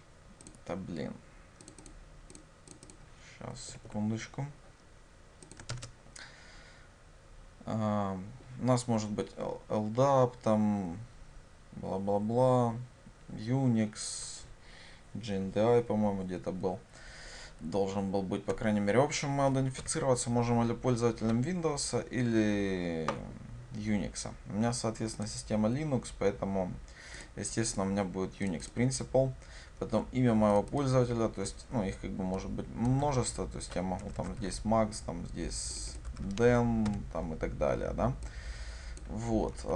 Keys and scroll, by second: 1.1 ctrl+space, 3.8 Delete, 5.9 ctrl+space, 18.6 Escape, 19.9 ctrl+y, 33.1 ctrl+c, 34.4 ctrl+v.